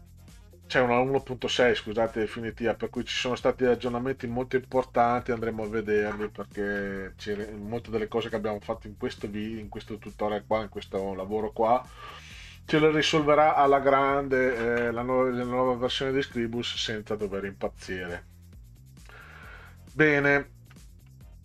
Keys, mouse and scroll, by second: 18.6 click, 20.7 middle click.